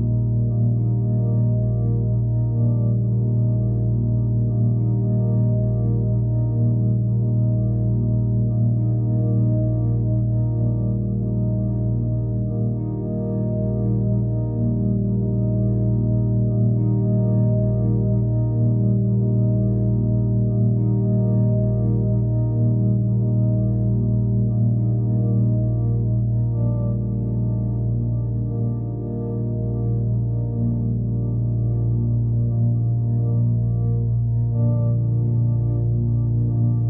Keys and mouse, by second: 1.5-1.9 alt+middle drag, 3.9 alt+middle drag, 5.4-8.2 shift+drag, 8.3-9.3 drag, 9.2 KP_0, 10.5 click, 12.2 middle drag, 12.5-13.0 alt+middle drag, 13.3 middle drag, 13.9 alt+middle click, 16.2 click, 17.1 click, 17.5 click, 18.0 click, 18.4-19.0 drag, 19.5-20.3 alt+middle drag, 20.6 middle drag, 22.0-24.1 alt+middle drag, 27.5 middle drag, 28.0 middle drag, 28.4-29.7 alt+middle drag, 29.8 middle drag, 32.9 click, 34.5-36.1 drag.